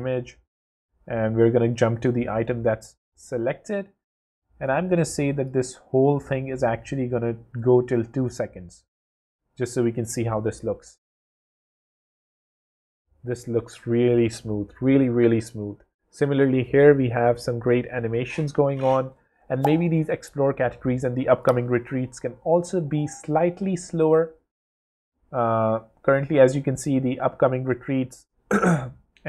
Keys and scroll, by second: 10.2 w.